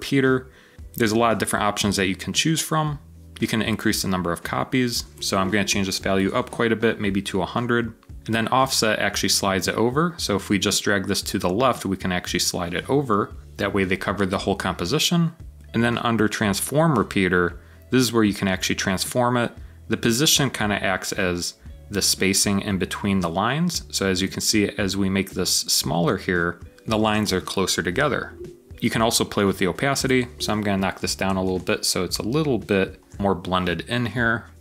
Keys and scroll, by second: 5.6-6.7 typing, 13.1-13.9 typing, 26.5-27.3 typing, 30.8-33.5 typing, 31.3 Return.